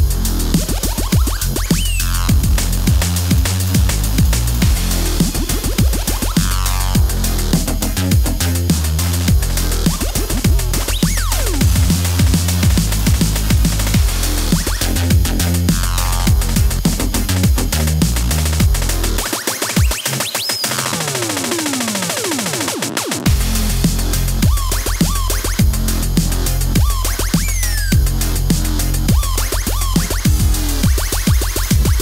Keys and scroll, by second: 0.6 super+Tab, 1.1-2.0 typing, 3.3 x, 8.3 Home, 9.1 KP_0, 9.2 u, 9.9 KP_0, 11.5 space, 12.4 space, 16.8 KP_0, 16.9 Home, 17.6 KP_Subtract, 17.7 KP_0, 18.0 KP_Subtract, 18.1 Home, 18.5 KP_Subtract, 18.6 Return, 23.0 KP_0, 25.5 space, 26.2 space, 29.3 t, 30.1 KP_0, 31.1 KP_0.